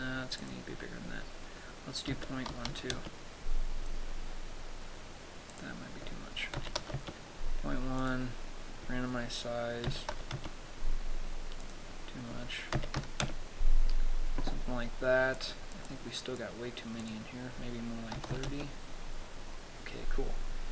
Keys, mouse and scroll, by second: 0.8 click, 6.1 click, 8.5 click, 12.2 click, 15.8 click, 16.4 click, 17.5 click.